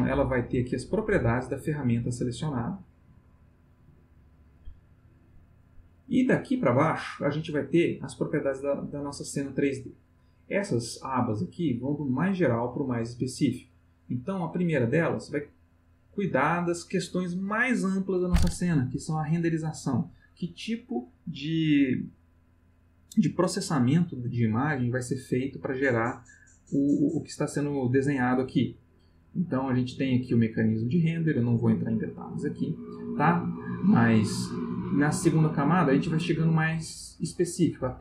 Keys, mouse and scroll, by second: 2.3 click, 3.4 click, 3.8 click, 4.8 click, 14.4 click, 34.7 click.